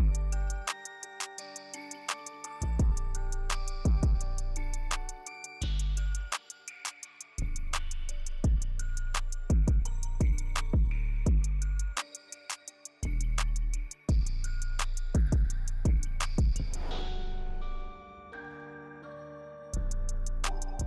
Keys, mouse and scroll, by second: 0.0 middle click, 0.3 shift+middle drag, 0.5 shift+click, 0.9 middle click, 1.3 shift+click, 1.8 shift+s, 2.6 shift+middle click, 5.3 click, 6.1 click, 7.3 click, 8.5 click, 8.8 middle click, 9.1 shift+middle click, 9.6 shift+click, 9.9 click, 12.2 click, 13.3 click, 14.7 click, 15.7 click.